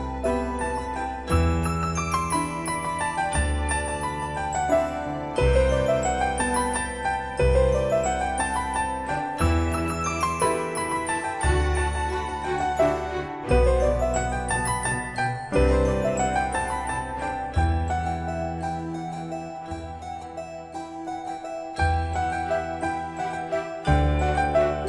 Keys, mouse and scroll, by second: 0.4 scroll down 1, 1.8 click, 4.7-6.7 scroll up 1, 11.7 click, 14.1-14.5 scroll down 1, 14.8-15.3 scroll up 1, 17.4-17.9 typing, 19.0 typing, 19.3 click, 22.6-23.7 typing.